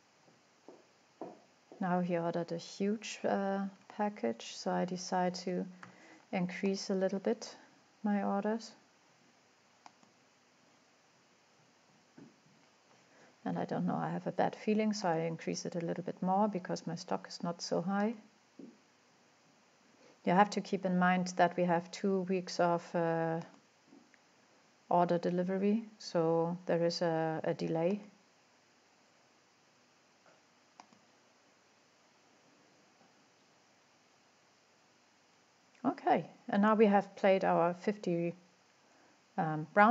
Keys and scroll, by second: 3.6 typing, 5.2-6.3 typing, 13.2-13.9 typing.